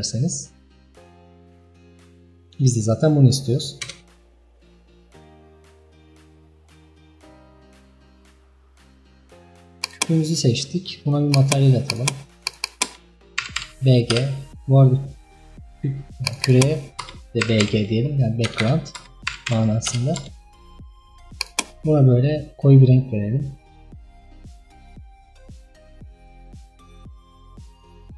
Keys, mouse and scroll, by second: 2.1-3.8 middle drag, 3.8 KP_0, 6.1-7.5 scroll down 24, 7.8-8.7 middle drag, 9.0 scroll down 5, 9.6 scroll down 5, 10.0 click, 11.3-12.1 drag, 12.5-16.4 drag, 19.9 BackSpace, 22.4 click, 25.2-27.6 drag, 27.6-28.1 scroll down 7.